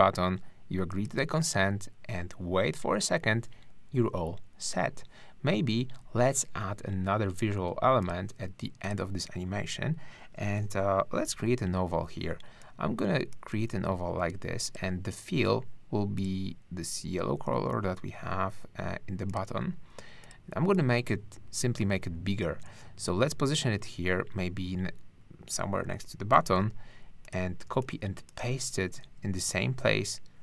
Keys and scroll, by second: 11.2 o, 26.3 super+c, 27.7 space, 29.0 super+v.